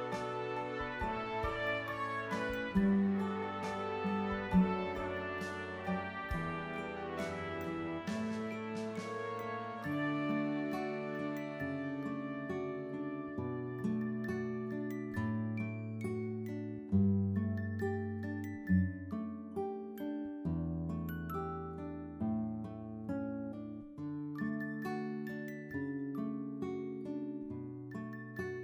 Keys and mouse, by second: 0.8 click, 2.1 click, 5.2 click, 7.2 click, 8.4 click, 13.3 click, 13.9 click, 17.1 click, 21.6 click, 22.2 click, 25.5 click.